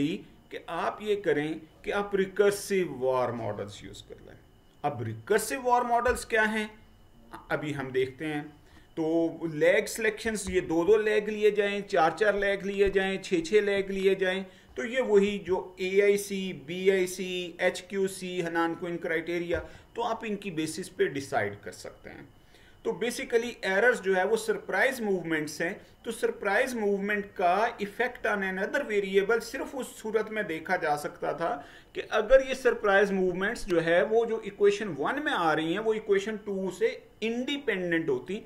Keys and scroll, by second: 7.6 Right, 10.7 Left, 15.4 Right.